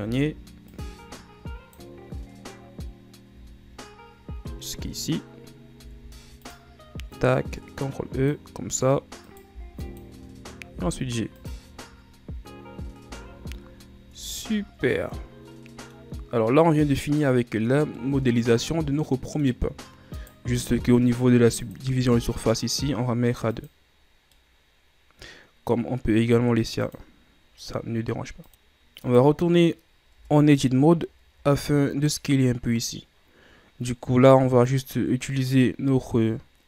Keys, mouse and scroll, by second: 0.2 b, 3.5 b, 6.0 ctrl+e, 9.4 right click, 9.7 b, 10.9 g, 12.0-13.2 ctrl+scroll up 4, 13.2 z, 13.5-14.3 scroll down 9, 14.3 Tab, 14.7 ctrl+scroll down 4, 15.1-16.2 middle drag, 16.2 scroll down 2, 16.8-20.4 middle drag, 20.4 right click, 21.8 click, 23.7-24.5 drag, 24.5-27.0 middle drag, 27.0-28.5 drag, 28.5 middle click, 28.8-29.2 scroll up 1, 29.2 right click, 30.3 Tab, 31.1-31.7 scroll up 1, 31.7-33.1 ctrl+scroll up 1, 34.8 click.